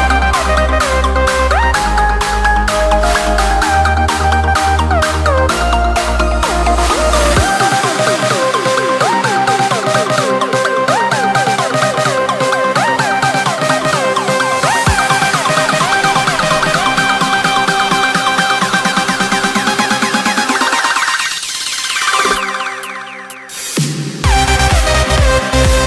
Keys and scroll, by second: 0.1 ctrl+space, 1.1 ctrl+3, 1.6 ctrl+space, 5.3 ctrl+space, 15.6 ctrl+space, 20.1 ctrl+z, 24.9 ctrl+space.